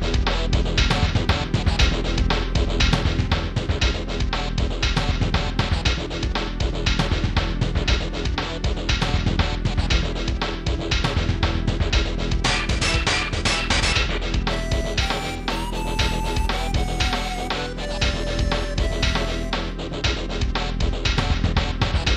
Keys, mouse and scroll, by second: 2.8 click, 3.4 click, 4.0 scroll down 1, 5.4 click, 7.1 shift+d, 8.3 click, 10.3 ctrl+z, 11.0 click, 12.2 g, 12.8 shift+z, 14.8 click, 15.4 scroll up 1, 16.0 shift+middle click, 17.6 ctrl+s, 17.8 click, 20.1 ctrl+s, 20.3 click, 20.7 right click, 21.1 Tab, 21.4 click.